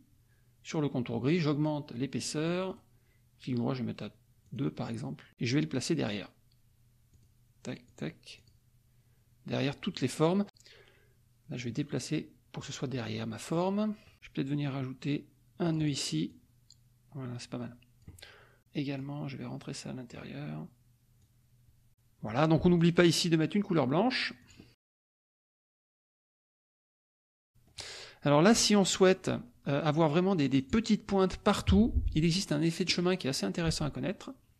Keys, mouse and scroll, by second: 1.9 middle click, 2.7 right click, 4.5 click, 5.9 click, 7.1 click, 7.8 click, 8.3 click, 10.8 middle click, 10.8-11.5 scroll up 1, 11.5-12.8 drag, 15.6 click, 16.2-18.1 drag, 18.9-20.2 drag, 21.2 click, 22.5 F2, 22.7 click, 24.3 click, 25.1 F1, 25.2 click, 26.2 KP_Subtract, 27.3 click, 28.7 click, 29.6 F2, 30.5 click, 31.7 F1, 32.8 click.